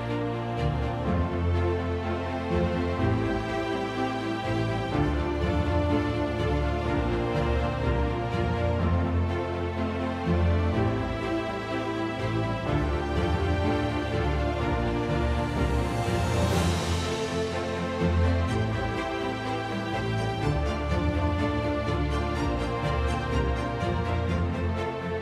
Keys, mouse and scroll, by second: 0.0 click, 0.8 ctrl+g, 1.6 -, 2.5 ctrl+d, 4.4 ctrl+click, 4.9 h, 6.9-10.4 ctrl+drag, 10.6-11.7 drag, 11.4 ctrl+shift+g, 12.3 click, 13.6 click, 14.0 click, 16.0 click, 17.3 click, 18.2 ctrl+shift+g, 19.1 click, 20.8 click, 22.0 ctrl+d, 24.2 click.